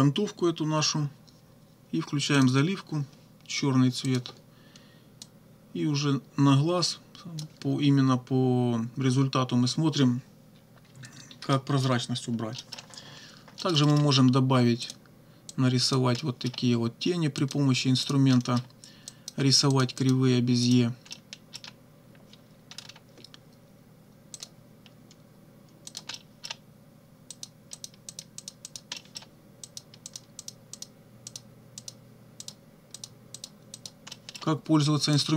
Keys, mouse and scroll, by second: 2.4 click, 4.1 click, 5.2-7.6 drag, 10.9 -, 11.6 click, 12.6 middle click, 13.6 middle click, 14.9 click, 15.5 click, 16.3 middle click, 17.4 click, 18.0 click, 18.4 middle click, 19.1 click, 19.8 click, 20.7 click, 21.1 middle click, 22.8-23.1 scroll up 1, 24.4 click, 25.9 click, 26.1 right click, 27.4 click, 27.8 click, 28.2 click, 28.4 click, 29.0 middle click, 29.6 click, 30.1 click, 30.4 click, 30.8 click, 31.3 click, 31.8 click, 32.4 click, 33.0 click, 33.4 click, 33.8 click, 34.1 middle click, 35.1 click.